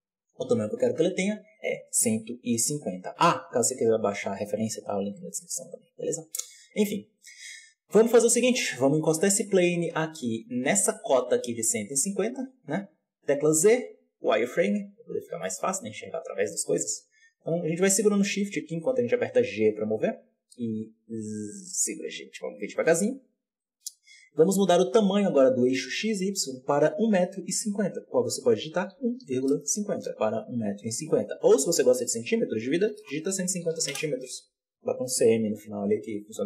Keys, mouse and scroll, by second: 0.6-1.2 scroll up 1, 8.3 g, 13.1 z, 15.3 shift+middle drag, 15.5-16.3 scroll up 1, 16.6 g, 19.9 g, 23.3-23.8 scroll down 1, 23.8-24.6 scroll down 1, 24.6-24.9 scroll down 1, 24.9-36.4 drag.